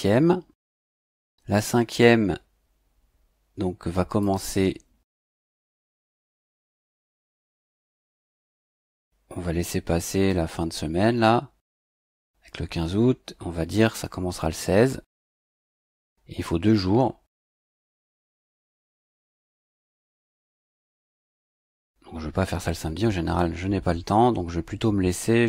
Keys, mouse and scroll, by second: 4.2 click, 7.8 click, 13.7 click, 15.2 click, 20.0 click.